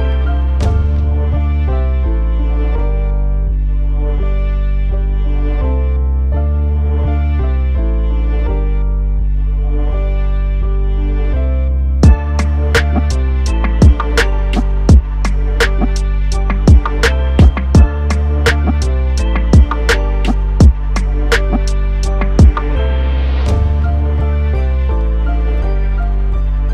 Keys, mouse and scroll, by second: 0.3 g, 1.5 x, 6.8 click, 8.5 i, 9.8 click, 14.7 click, 16.2 g, 16.8 x, 19.7 Escape, 21.0 click, 22.2 click, 23.2 g, 26.0 click.